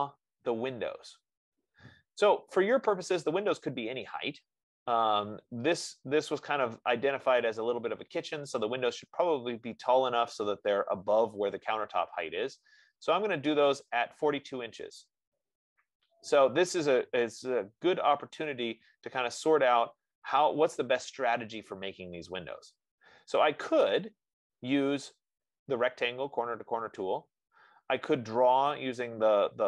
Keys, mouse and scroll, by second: 3.6-8.5 drag.